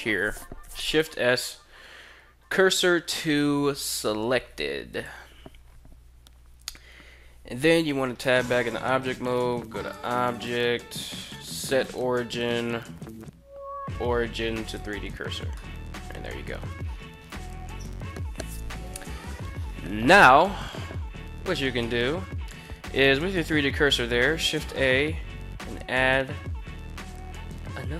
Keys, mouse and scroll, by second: 0.6 shift+s, 7.6 Tab, 9.3 click, 9.9-14.5 drag, 15.1-15.8 middle drag, 16.8 KP_1, 23.4 shift+a.